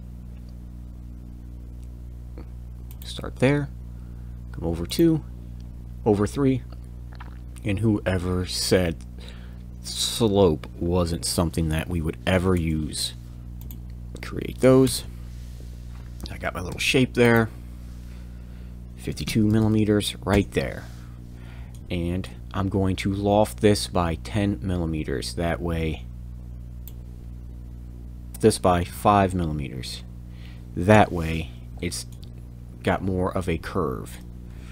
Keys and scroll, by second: 12.5 Return, 13.4 l, 14.8 Return, 16.7 e, 19.1 5, 19.2 2, 19.4 m, 20.3 Return, 22.4 f, 28.7 5, 28.8 m, 30.9 Return.